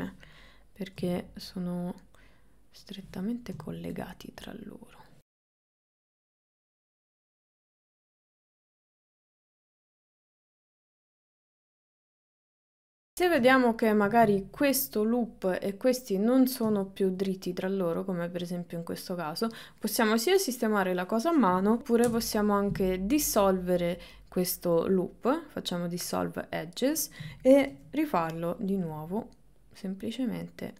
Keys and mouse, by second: 1.0 g, 3.7 shift+middle click, 4.5 click, 5.4 g, 6.1 g, 6.4 click, 6.9 g, 9.3 g, 9.7 middle click, 10.5 middle click, 10.9 KP_1, 11.0 KP_3, 11.5 shift+middle click, 11.9 g, 12.1 g, 13.9 shift+middle click, 16.8 shift+middle click, 22.1 Delete, 27.7 ctrl+r.